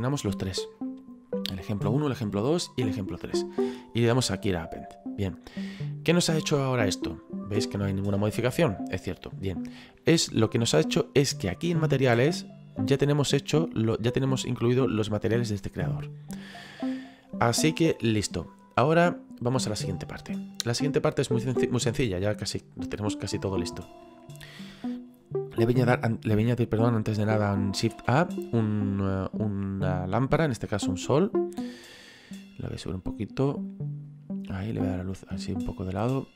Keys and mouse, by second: 0.8 click, 3.7 click, 11.8 click, 13.0 click, 23.4 click, 30.9 click, 32.7 click, 34.7 click, 36.2 click.